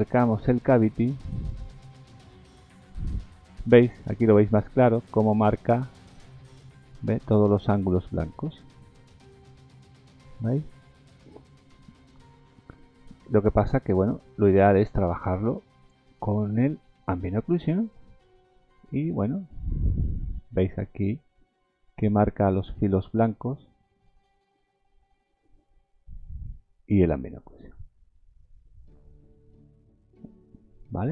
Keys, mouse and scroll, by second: 1.6 click, 16.0 click, 18.6 click.